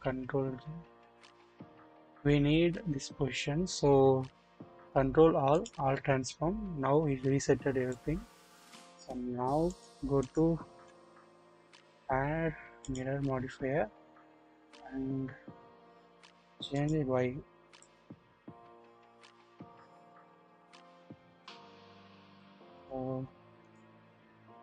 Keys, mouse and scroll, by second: 0.0 ctrl+z, 1.2 ctrl+z, 1.9 scroll up 1, 4.7 ctrl+a, 7.9 click, 9.6 click, 12.9 click, 16.0 middle click, 17.7-22.5 middle drag, 23.6 middle click, 24.3-24.6 scroll up 1.